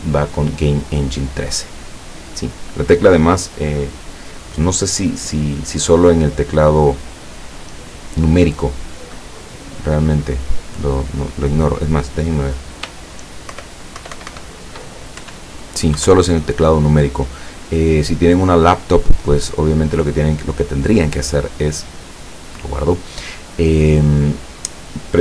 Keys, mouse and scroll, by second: 13.5 shift+=, 15.2 shift+KP_Add, 16.0 KP_Subtract, 22.3 click.